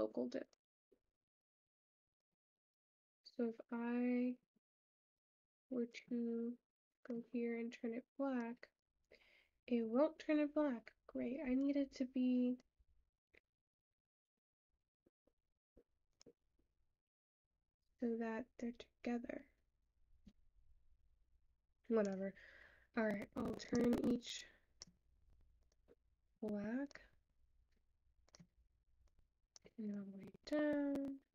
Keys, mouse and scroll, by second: 1.5 click, 14.3 ctrl+z, 25.9 click.